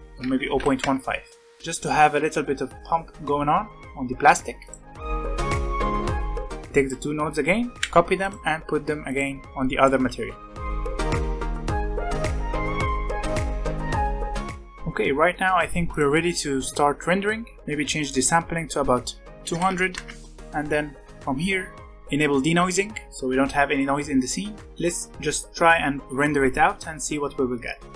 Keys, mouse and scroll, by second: 0.5 click, 1.3 alt+a, 2.3 scroll down 5, 4.5-5.8 drag, 5.8 alt+a, 6.1 scroll down 4, 6.5 click, 7.6 ctrl+c, 8.2 click, 9.0 click, 10.0 ctrl+v, 10.5 click, 10.7 alt+a, 11.0 click, 11.1 x, 11.2 ctrl+z, 11.9 click, 12.0 x, 12.2 ctrl+v, 12.5 ctrl+v, 12.5 click, 12.8 alt+a, 13.3-13.9 scroll down 10, 14.1 scroll up 3, 14.5 scroll down 1, 15.9 click, 18.0-19.6 drag, 19.6 KP_0, 21.0 click, 21.4-22.5 scroll down 13, 22.5 click, 24.4-24.9 scroll up 7.